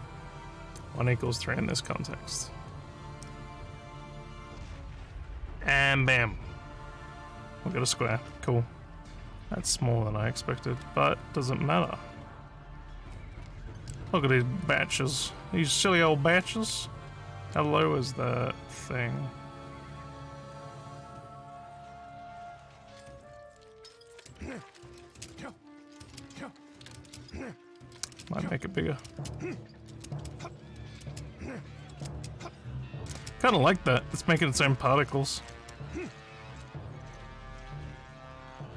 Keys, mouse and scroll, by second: 10.8 w, 12.9-17.7 typing, 22.5 w, 23.1 a, 24.1-27.1 typing, 28.8-31.1 typing, 32.2 space, 33.2-34.8 typing, 37.3 d, 37.9 a.